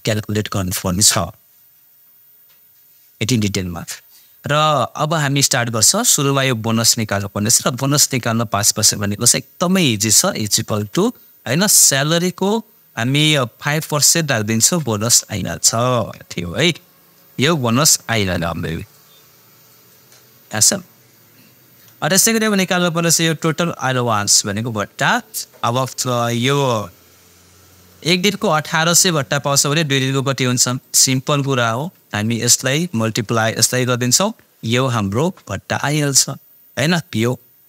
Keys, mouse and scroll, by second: 6.5 click, 10.8 =, 12.3 click, 14.6 shift+5, 17.9 Return, 18.4-23.0 drag, 23.4 click, 28.3 click, 31.9 =, 32.4 click, 35.2 Return, 37.3 click.